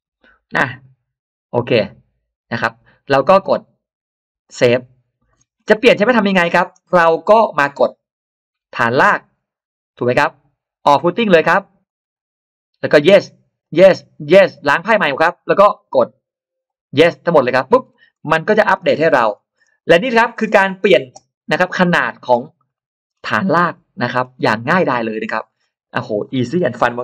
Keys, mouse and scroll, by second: 4.3 click, 5.1-6.8 scroll down 2, 5.6 middle click, 6.4 middle click, 6.7 click, 8.6 click, 11.7 click, 12.7 click, 13.5 click, 14.1 click, 15.0 click, 15.7 click, 16.5 click, 17.7-18.8 scroll up 4, 18.1 middle click, 19.1-19.4 scroll up 2, 19.4-19.7 scroll down 2, 19.7 middle click, 19.9-20.9 scroll down 4, 20.5 middle click, 21.2 scroll up 2, 21.4 middle click, 21.6-22.2 scroll down 4, 21.8 middle click, 22.4-22.7 scroll up 2, 22.6 middle click, 23.2-23.8 scroll up 1, 24.0-24.5 scroll down 1, 24.3 middle click, 24.8-25.1 scroll up 1, 25.4 middle click.